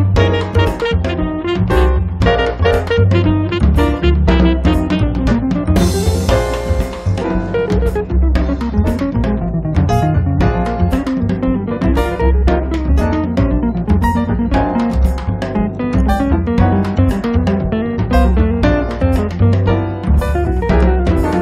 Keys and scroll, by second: 8.2 s, 14.0 space, 14.9 Escape, 19.3 r.